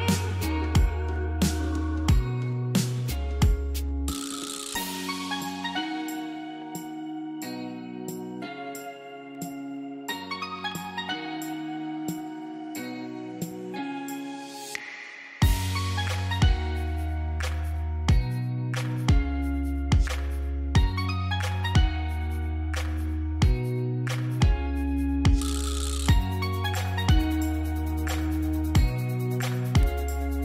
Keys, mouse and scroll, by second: 0.4 click, 0.9-1.5 scroll down 1, 1.5 scroll up 1, 1.8 space, 2.0 click, 2.3 space, 2.7 scroll down 1, 3.0 scroll up 1, 3.2 space, 3.4 click, 3.7 space, 5.1 scroll down 1, 5.4-6.3 scroll up 1, 6.3 click, 9.1 scroll down 1, 9.5-10.2 scroll up 1, 10.2 scroll down 1, 10.4 scroll up 1, 10.7 space, 11.0 click, 11.2 space, 13.1 ctrl+0, 16.9 F12, 16.9 ctrl+0, 20.0 scroll down 1, 20.8-21.1 scroll up 1, 21.1 scroll down 1, 21.3 scroll up 1, 21.4 space, 21.6 click, 21.9 space, 22.6 click, 23.5 scroll down 1, 23.7-24.0 scroll up 1, 24.2 ctrl+j, 24.6 ctrl+shift+a, 28.7 scroll down 1, 29.5 click, 30.0 space, 30.2 click.